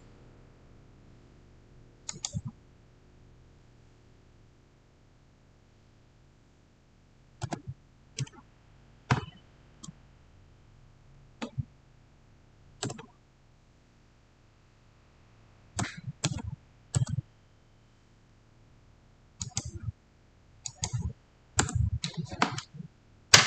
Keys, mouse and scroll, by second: 2.0 click, 7.3-8.0 typing, 10.6-11.8 typing, 12.7 Return, 15.6-16.1 typing, 16.8 Return, 19.3 click, 21.5 Return.